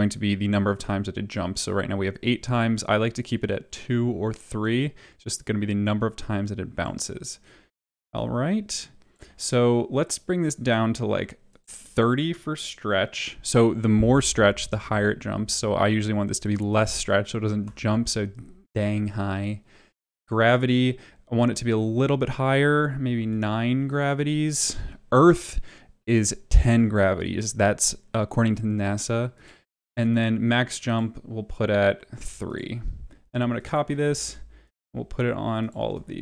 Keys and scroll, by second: 17.2-18.1 typing, 23.1 9, 32.1 3, 34.1 ctrl+c, 35.9 ctrl+v.